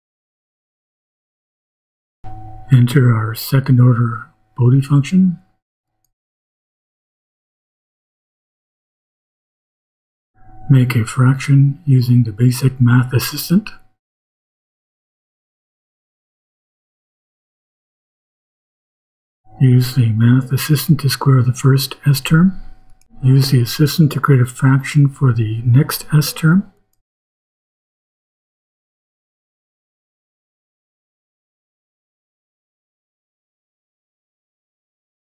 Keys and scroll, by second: 0.4 ;, 1.0 Return, 1.6 shift+Return, 1.8 shift+h, 2.5 shift+2, 4.3 shift+;, 5.0 shift+=, 12.4 k, 14.0 Down, 16.7 s, 18.8 2, 19.9 Right, 20.6 shift+Right, 20.9 shift+=, 26.7 i, 27.2 Down, 27.9 shift+Down, 28.1 shift+q, 29.2 shift+Right, 29.9 shift+Right, 30.3 shift+s, 31.8 s, 33.2 shift+=, 34.9 i.